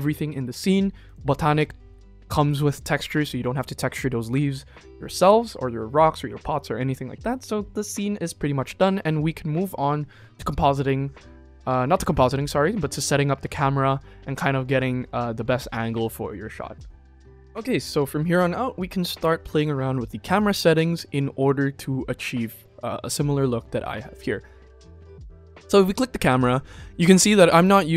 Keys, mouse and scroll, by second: 0.9 click, 2.9 click, 17.1 click, 24.8 click, 27.0 click.